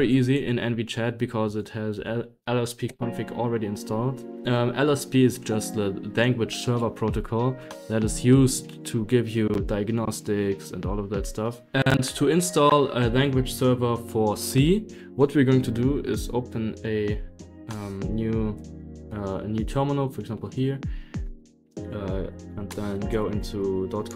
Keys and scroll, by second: 0.0-1.9 typing, 0.6 Escape, 2.8 Return, 16.1 super+d, 17.0 super+d, 17.5 super+d, 19.5 ctrl+*, 19.8 ctrl+*, 19.9 ctrl+*, 20.1 ctrl+*, 20.6-24.1 typing, 23.1 Return.